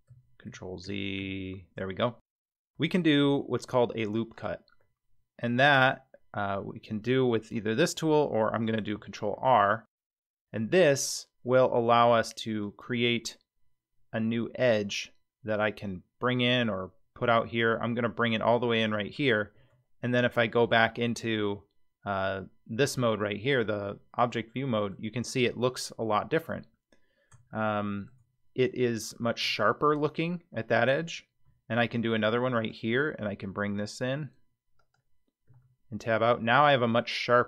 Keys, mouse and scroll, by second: 0.1 ctrl+z, 0.5 ctrl+z, 0.8 ctrl+z, 1.2 ctrl+z, 2.6-3.6 scroll down 1, 4.3 click, 9.1 ctrl+r, 19.6 Tab, 23.7-24.9 middle drag, 26.3-26.7 scroll up 2, 26.9-27.3 scroll down 1, 27.5-28.1 shift+middle drag, 29.4 Tab, 31.8 ctrl+r, 35.5 Tab, 36.2-36.7 middle drag.